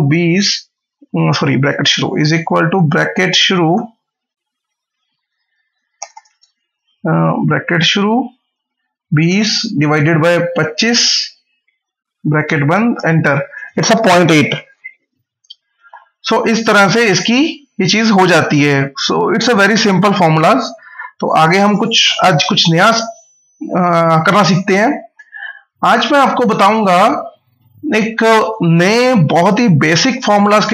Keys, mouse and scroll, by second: 1.2 BackSpace, 3.6 shift+9, 5.8 BackSpace, 7.3 shift+9, 8.2 Left, 12.4 shift+0, 12.8 Return, 18.0 click, 18.4 scroll down 1, 19.5 scroll up 1, 20.7 click, 22.0 typing, 22.8 click, 28.2 click.